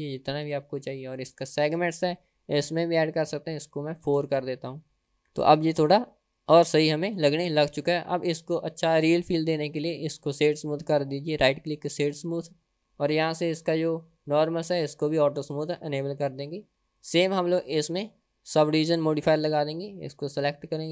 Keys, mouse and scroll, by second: 1.8-5.2 drag, 6.0-6.6 scroll up 3, 6.6-7.3 scroll down 3, 7.3 middle click, 8.5-9.0 scroll down 1, 9.0 scroll down 1, 9.7 click, 10.5-12.8 right drag, 13.1 click, 14.3 click, 16.7-17.1 scroll up 2, 17.1-17.6 middle drag, 17.8 drag, 20.2 click.